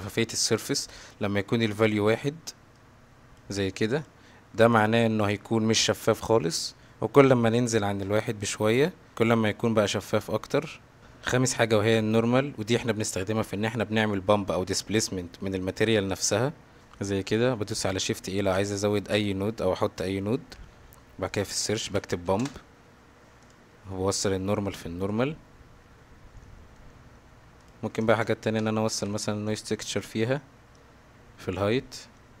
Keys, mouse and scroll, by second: 1.0 middle click, 2.8-4.0 drag, 7.6-11.0 drag, 18.4 shift+a, 24.4-25.1 drag, 26.4 middle click, 28.1 shift+a, 30.8-31.6 drag.